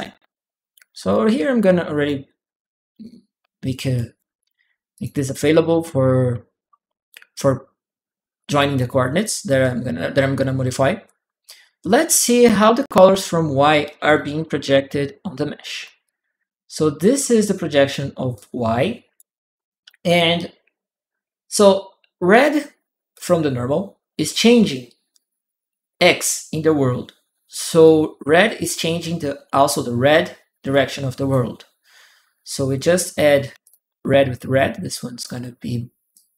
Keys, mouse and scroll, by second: 0.0-1.8 drag, 3.7 click, 4.7 click, 8.2 click, 8.9 click, 9.4 click, 11.2 click, 13.8 click, 14.5 shift+p, 15.8-17.7 drag, 18.1 right click, 22.9 click, 30.5 click, 33.3 a, 33.3 a, 33.4 click, 33.5 a, 33.5 a, 34.2 click, 35.9 click.